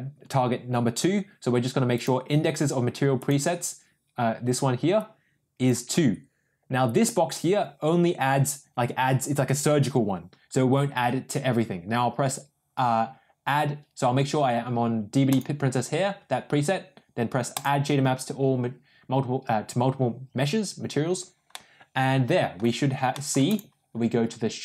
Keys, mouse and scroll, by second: 4.9 click, 15.2 click, 17.5 drag, 21.5-22.5 middle drag, 23.0 middle click, 23.4 click.